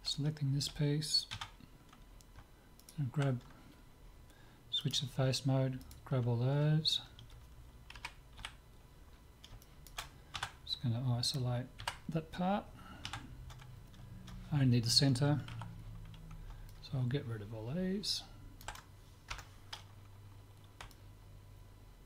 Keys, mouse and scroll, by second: 1.4 Tab, 2.8-4.6 right drag, 4.9-6.6 drag, 5.8-7.8 right drag, 7.9 KP_7, 8.4 z, 9.1-11.6 middle drag, 10.4 Tab, 11.8 KP_Divide, 13.1 Tab, 15.5 c, 20.9-22.0 middle drag.